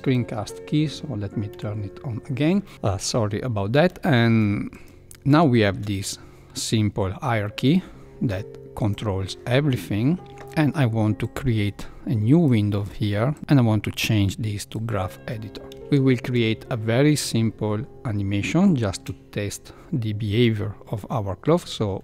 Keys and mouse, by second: 1.5 n, 3.8 shift+middle click, 4.7 click, 5.5 shift+middle click, 7.6 g, 11.2-12.4 drag, 15.8 shift+Left, 15.9 shift+middle click, 18.6 shift+middle click.